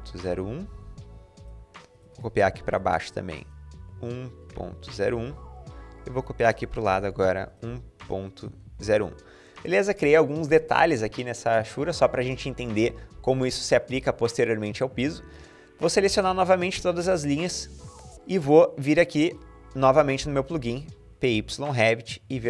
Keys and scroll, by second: 0.0-0.5 typing, 2.4-5.6 typing, 6.7-9.2 typing, 9.3 Escape.